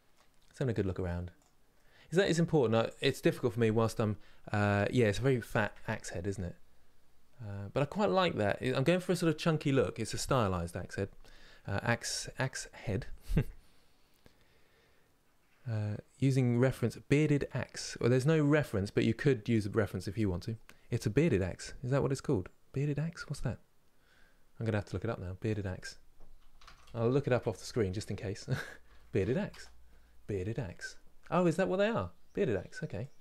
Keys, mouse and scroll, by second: 0.1-0.6 scroll down 4, 0.7-1.1 scroll down 2, 1.1 click, 1.4-8.6 middle drag, 18.3-33.2 middle drag.